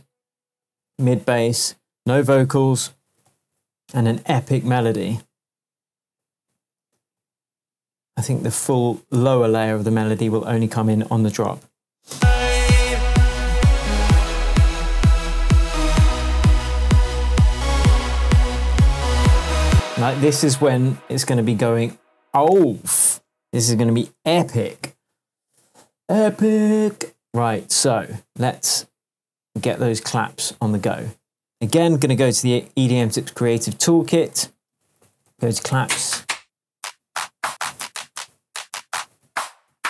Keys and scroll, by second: 3.3 super+l, 5.6 BackSpace, 6.8 super+z, 8.7 BackSpace, 12.1 space, 19.7 space, 33.8 Up, 33.9 Right, 34.3 Down, 34.9 Up, 35.7 Down, 37.5 Up, 38.4 Down.